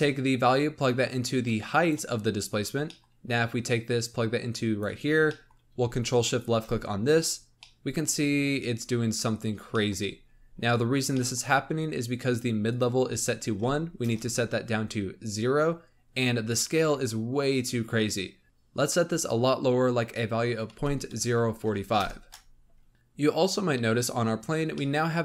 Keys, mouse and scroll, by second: 1.0-2.8 drag, 2.8-3.6 middle drag, 3.6-5.0 drag, 5.0 scroll down 5, 5.2-5.7 middle drag, 6.2-7.1 ctrl+shift+drag, 7.5 middle click, 8.3-8.6 scroll down 3, 9.2-9.8 scroll down 5, 9.8 middle click, 10.0-10.7 scroll up 14, 11.1 middle click, 12.6-15.6 drag, 15.8 scroll down 1, 18.4-19.5 drag, 22.9-23.9 middle drag, 23.9-24.6 scroll down 2, 24.6-25.2 middle drag.